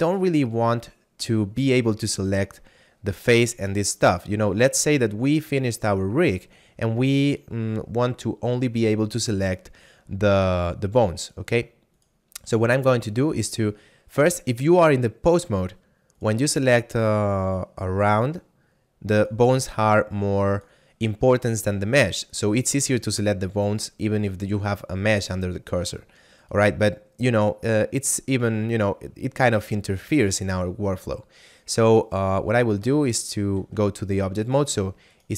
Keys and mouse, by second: 3.2 right click, 4.6 a, 11.2 right click, 16.2 right click, 19.2 right click, 26.4 right click, 32.0 right click, 33.2 ctrl+Tab, 34.5 right click.